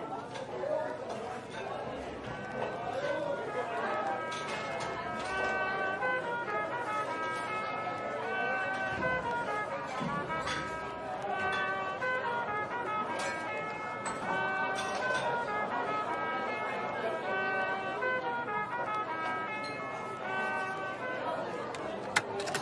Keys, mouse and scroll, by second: 0.0-0.6 typing, 1.8 middle click, 2.2-2.5 scroll up 1, 3.4 typing, 5.0 typing, 8.4 shift+click, 8.8-9.6 typing, 11.0-13.5 typing, 14.8-17.6 typing, 21.8-22.6 typing.